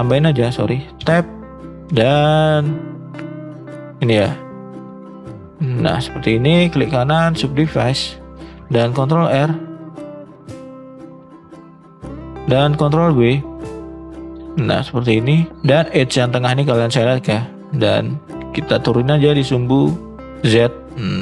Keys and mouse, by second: 0.1 click, 1.0 Tab, 1.4-1.8 middle drag, 2.0 shift+middle click, 2.7 middle click, 4.0 shift+click, 4.7 shift+click, 6.1 shift+click, 6.7 right click, 7.8 shift+middle click, 9.0 ctrl+r, 12.9 ctrl+b, 19.0-20.7 drag.